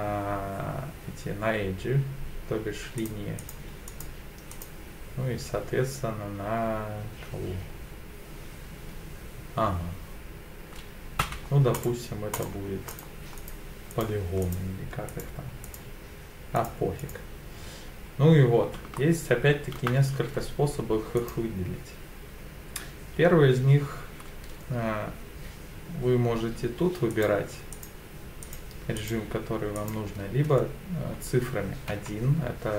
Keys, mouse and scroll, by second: 3.0 click, 3.4 click, 3.9 click, 4.5 click, 11.2 3, 11.7 click, 12.4 click, 12.9 click, 13.4 click, 13.9 click, 14.4 click, 15.1 click, 15.6 click, 16.6 click, 17.0 click, 19.0 shift+middle click, 21.2 click, 27.1 click, 27.7 click, 28.4 click, 29.0 click, 29.7 click, 31.9 1.